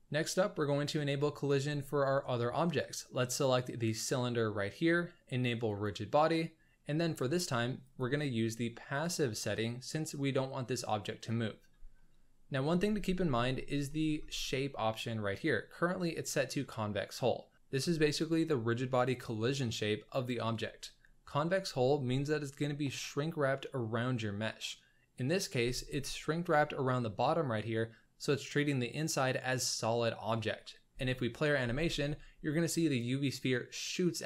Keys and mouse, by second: 2.7 click, 5.6 click, 7.9-9.1 drag, 11.9-12.5 middle drag, 12.9 z, 13.8 shift+drag, 30.9 space, 31.6 space.